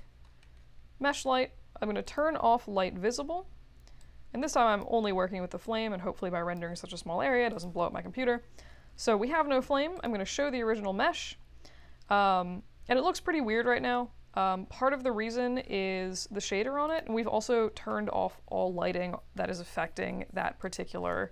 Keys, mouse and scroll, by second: 0.2 middle click, 0.5 middle click, 2.0 click, 4.0-4.8 drag, 5.6-6.5 drag, 7.5 click, 16.8 click, 20.6 click.